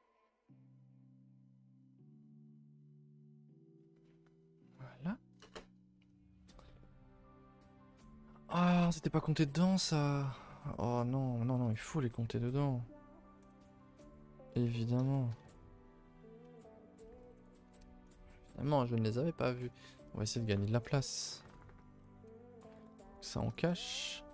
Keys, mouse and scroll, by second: 7.2 click, 7.6-7.9 scroll up 2, 8.0 click, 8.3-9.1 middle drag, 9.1 Tab, 9.5-10.0 middle drag, 10.0 Tab, 10.2-10.9 middle drag, 10.9 shift+click, 13.5 ctrl+j, 13.9 a, 14.1 a, 14.6 click, 14.7 Tab, 14.9-15.5 scroll up 3, 15.1 shift+middle drag, 15.5 a, 15.6 a, 15.8-16.5 scroll down 4, 16.5 Tab, 17.2 ctrl+i, 17.4 h, 17.7 a, 17.9 a, 19.6 Tab, 20.4-23.7 typing, 23.9-24.3 scroll up 2.